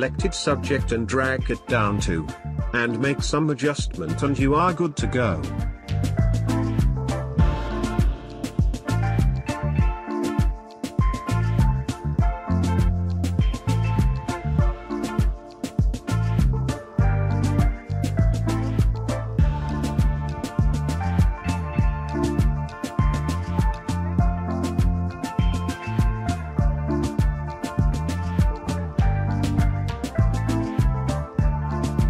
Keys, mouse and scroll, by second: 3.8-10.7 drag, 10.7-17.9 drag, 17.9-23.4 drag, 23.4 right click, 26.1 click, 28.3 ctrl+space, 28.5 ctrl+click, 29.0 ctrl+space, 31.2-32.0 drag.